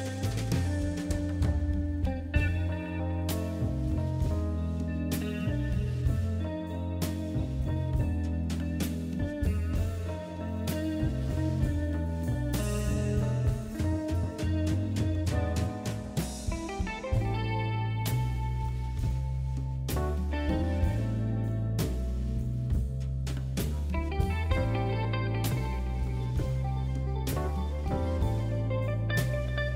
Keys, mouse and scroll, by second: 2.3 click, 9.5 click, 26.6 click, 29.3 click.